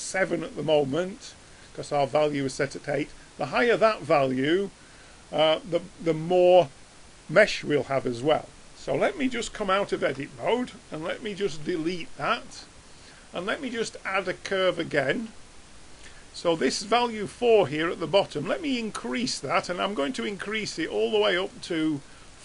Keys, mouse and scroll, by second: 2.7 click, 3.0 click, 10.0 Tab, 11.6 x, 13.4-15.3 drag, 19.1-20.2 drag.